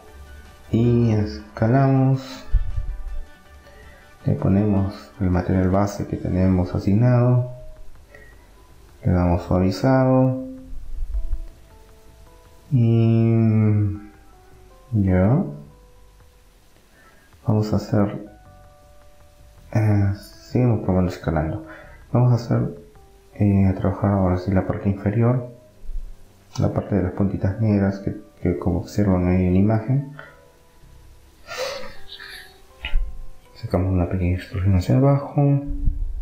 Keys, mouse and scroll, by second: 0.1 s, 2.3-4.1 middle drag, 4.1-5.8 drag, 5.8 middle click, 8.6-10.3 drag, 10.3-11.3 middle drag, 12.7 middle click, 14.3-16.3 middle drag, 14.9 KP_1, 16.3 KP_3, 18.1 s, 22.8 Tab, 23.6-25.6 middle drag, 27.1 middle click, 27.3-28.8 drag, 28.8-32.3 right drag, 32.3 e, 32.6 right click.